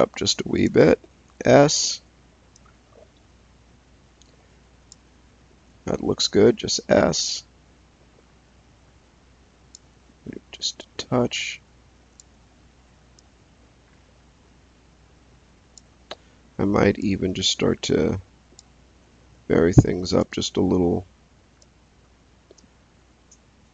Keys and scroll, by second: 1.2 s, 6.3 s, 12.4 s, 20.2 s.